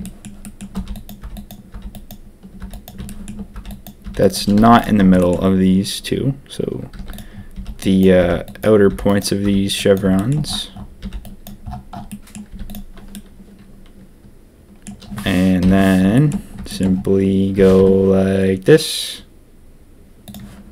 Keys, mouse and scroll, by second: 0.7-4.5 typing, 3.0 shift+middle click, 5.1 shift+middle click, 6.9-9.4 typing, 10.1 shift+click, 10.9 b, 12.0 click, 12.5 z, 13.1-14.8 drag, 15.6 ctrl+KP_3, 16.2 shift+click, 16.6 shift+click, 17.5 g.